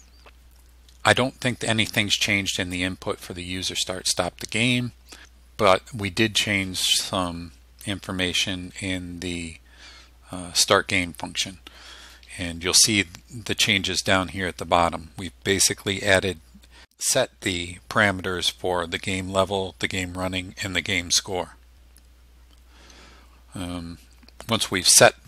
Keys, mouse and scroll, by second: 23.9 scroll down 1.